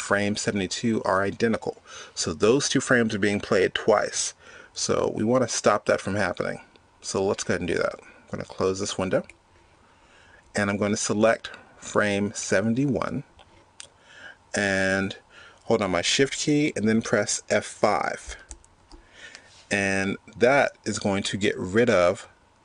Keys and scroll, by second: 18.6 shift+F5.